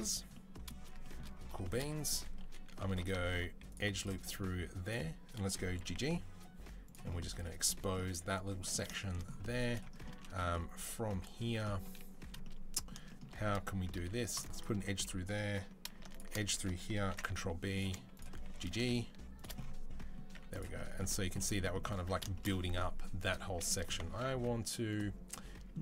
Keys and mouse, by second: 0.8 shift+click, 1.4 shift+click, 2.7 ctrl+click, 3.1 ctrl+r, 5.7 g, 7.1 Tab, 8.1 Tab, 8.7-15.9 middle drag, 10.6 2, 13.9 ctrl+r, 15.9 alt+shift+click, 16.1 middle click, 16.3-17.7 ctrl+drag, 16.9 ctrl+b, 17.1 middle click, 17.7 middle click, 18.3 g, 18.6 shift+click, 19.3-25.7 middle drag, 20.1 z, 20.9 Tab, 21.8 Tab, 24.0 ctrl+r, 25.7 shift+click.